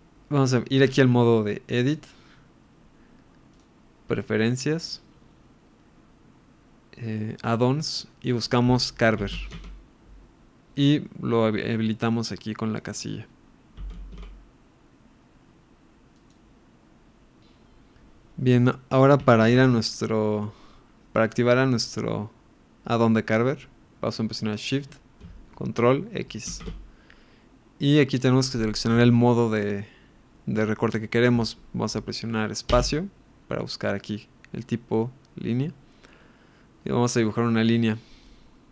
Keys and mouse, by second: 1.8-3.1 drag, 3.5-4.6 drag, 19.4 ctrl+KP_1, 26.4 ctrl+shift+x.